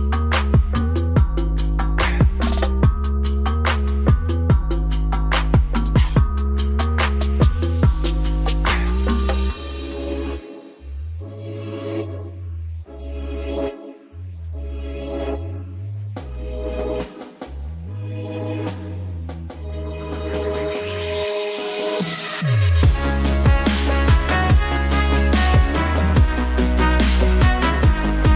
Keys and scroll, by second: 2.0 l, 2.5 e, 3.8-4.8 typing, 5.9 Return, 7.1 ctrl+alt+shift+e, 9.3-16.3 typing, 16.5 Return.